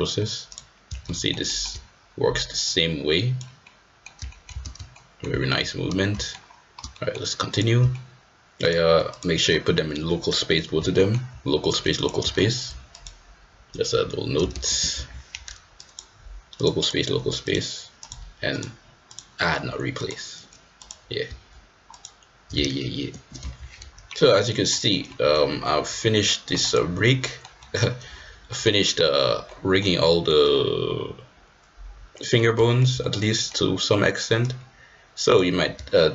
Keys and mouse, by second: 0.4-1.2 drag, 1.2 shift+middle drag, 1.4 shift+middle drag, 2.6 click, 3.6-4.0 middle drag, 4.2 shift+middle drag, 4.7 ctrl+z, 4.9-5.2 middle drag, 5.3 shift+middle drag, 6.1 shift+middle drag, 6.9 middle drag, 8.7-9.2 drag, 10.9 shift+middle click, 11.9-13.0 drag, 15.0 ctrl+shift+c, 15.8 click, 16.6 click, 16.8-17.5 drag, 18.1 click, 19.1-20.1 drag, 20.7-23.0 drag, 23.5 ctrl+shift+c, 24.0 middle drag, 24.5 middle drag, 25.1 middle drag, 27.1-27.4 middle drag, 27.6 middle click, 28.5 middle drag, 29.4-29.8 middle drag, 30.0 middle click, 32.1 middle click, 32.6 shift+middle click, 33.0 middle click, 33.3 middle click, 34.4-35.4 drag.